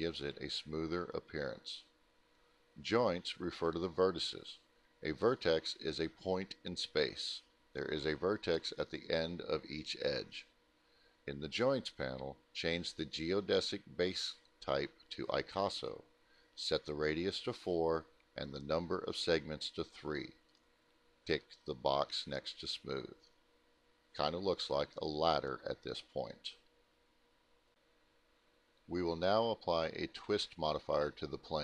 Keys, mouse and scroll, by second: 6.6 click, 8.8 click, 12.2 Return, 13.7 click, 14.7 4, 15.5 Return, 16.8 click, 17.6 click, 17.7 click, 18.2 middle click, 18.4 scroll down 1, 18.8 alt+middle click, 20.2-20.5 scroll up 1, 20.5 middle click, 21.0 middle click, 22.8 click, 23.5 t, 26.3 click, 27.9 middle click, 28.4 alt+middle click, 29.5 alt+middle click, 30.1 middle click.